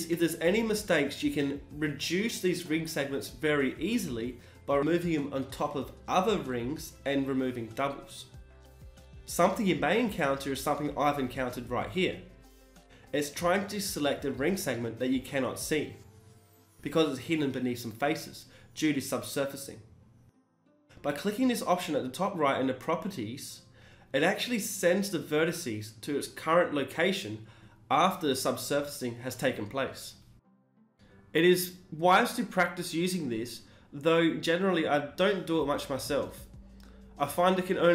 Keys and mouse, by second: 0.0 click, 0.9 Tab, 19.2-20.4 drag, 20.4 middle click, 21.2 shift+e, 23.1-25.6 middle drag, 25.6 n, 28.8-30.0 middle drag, 30.0-32.0 drag, 31.0 n, 32.0-36.6 middle drag, 36.6-37.9 drag.